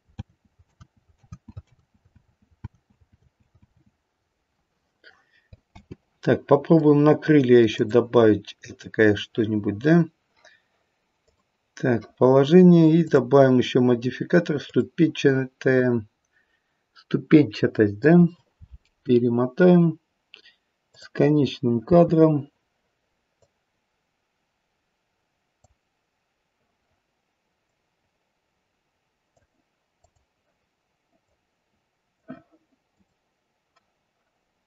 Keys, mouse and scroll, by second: 0.1 ctrl+z, 0.6 ctrl+z, 1.2 ctrl+z, 1.7 ctrl+z, 2.1 ctrl+z, 2.6 ctrl+z, 3.1 ctrl+z, 3.6 ctrl+z, 5.7 space, 6.2 middle click, 7.6 click, 11.2 click, 13.0 click, 18.5-19.2 scroll down 6, 20.9 click, 20.9-21.4 scroll down 1, 21.8 space, 23.4 click, 27.6 click, 30.0 click, 31.2 click, 32.8 click.